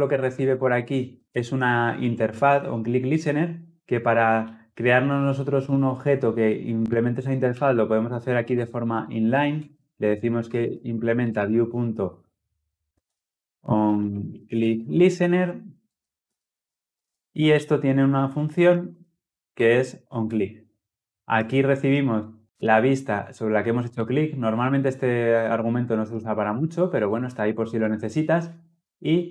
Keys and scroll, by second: 0.4 ctrl+p, 8.2 Return, 9.6 Return, 12.9 alt+Return, 14.8 Return, 16.7 ctrl+alt+l, 18.6 alt+Return.